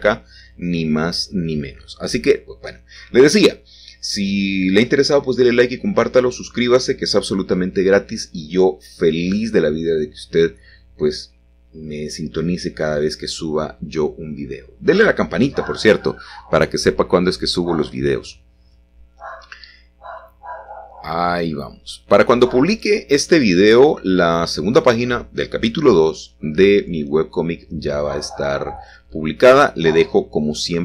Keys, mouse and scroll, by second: 1.0 typing, 2.1 click, 3.1 Tab, 3.5 click, 4.2 Tab, 5.1 click, 7.5 click, 10.0 alt+shift+click, 10.6 alt+shift+click, 11.0 alt+shift+click, 11.7-13.1 middle drag, 15.7 alt+shift+click, 17.3-18.0 scroll up 1, 18.2-19.2 scroll down 1, 20.0 alt+shift+click, 21.1-22.5 scroll down 1, 22.9-23.9 scroll up 1, 22.9 typing, 27.2 ctrl+i, 29.2 s, 29.2 z.